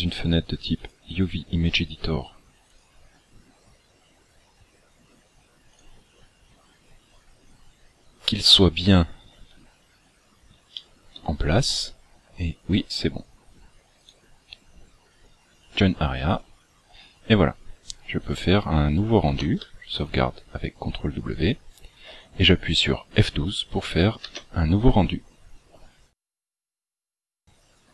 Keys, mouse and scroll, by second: 2.7 click, 7.5 scroll up 2, 8.7 shift+middle click, 10.7 shift+middle click, 11.3-12.1 scroll up 2, 13.9 right click, 17.1-17.7 scroll down 7, 19.2 ctrl+w.